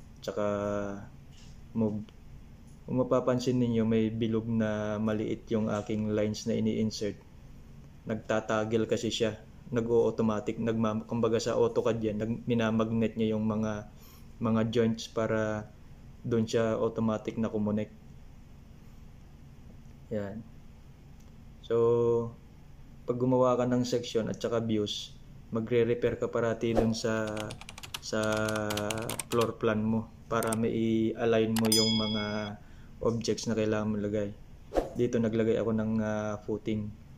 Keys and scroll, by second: 17.7 ctrl+c, 17.7 ctrl+v, 33.0 ctrl+c, 33.1 ctrl+v, 35.4 ctrl+v.